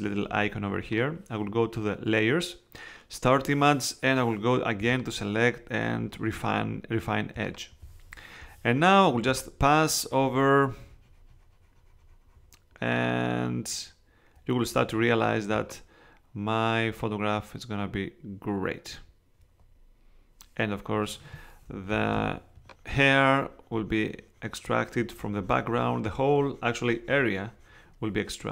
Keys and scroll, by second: 21.9 [.